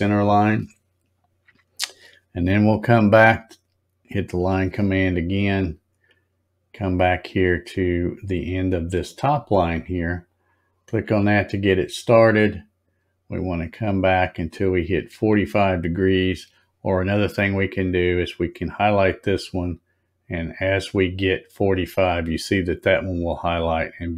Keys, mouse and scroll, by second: 4.0 click, 10.3 click.